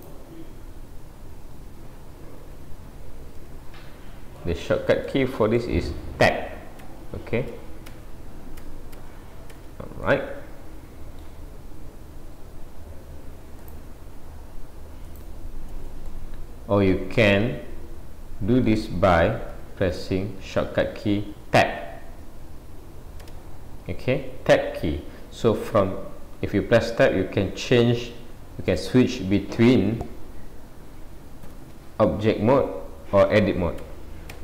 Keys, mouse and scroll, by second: 16.1 middle click, 16.1 scroll up 1, 19.2 a, 20.7 middle click, 23.2 Tab.